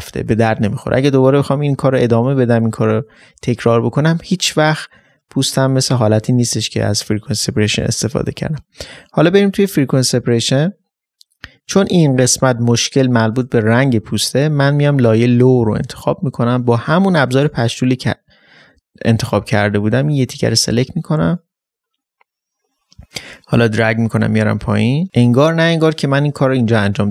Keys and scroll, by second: 2.9 ctrl+space.